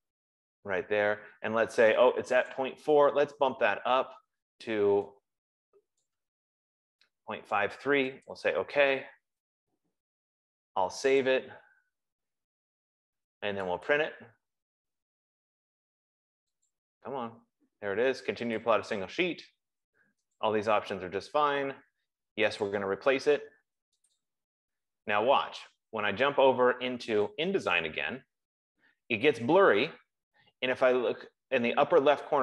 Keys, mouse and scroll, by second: 0.4 click, 2.9 click, 6.5 click, 7.4 click, 8.9 click, 11.7 click, 14.3 click, 17.2 click, 19.0 click, 20.8 click, 23.2 click, 24.6 click, 27.6 click.